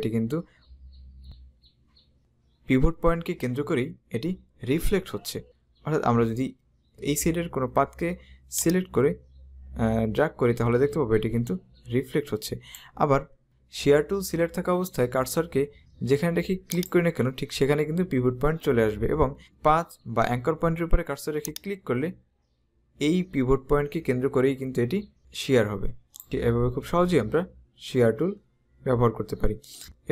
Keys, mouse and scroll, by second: 8.7 click, 16.8 click, 21.6 click, 29.8 right click.